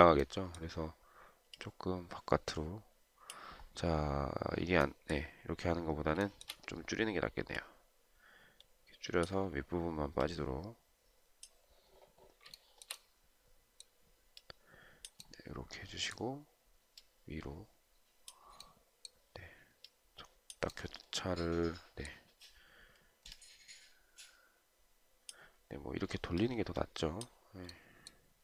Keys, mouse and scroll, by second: 6.5 shift+right click, 12.9 shift+right click.